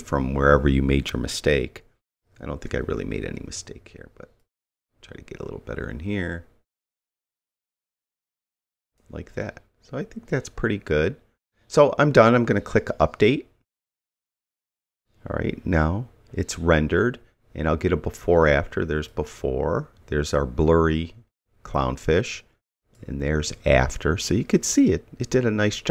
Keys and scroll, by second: 2.1 [.